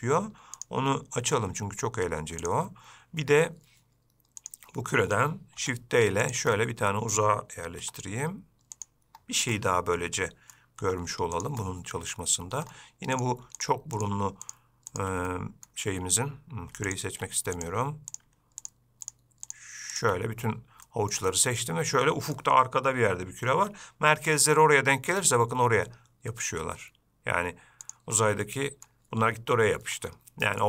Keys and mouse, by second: 0.8-3.8 drag, 5.8 shift+d, 6.8-7.4 middle drag, 8.1 g, 9.8-10.8 middle drag, 11.1 g, 11.9-12.7 middle drag, 13.4 drag, 13.8 shift+click, 14.2-14.8 shift+drag, 15.2 shift+click, 15.5-15.9 middle drag, 17.2 shift+drag, 17.8 click, 19.7 shift+click, 21.1 shift+middle click, 21.5-22.6 middle drag, 24.4 g, 28.5-29.1 middle drag, 30.2-30.6 middle drag.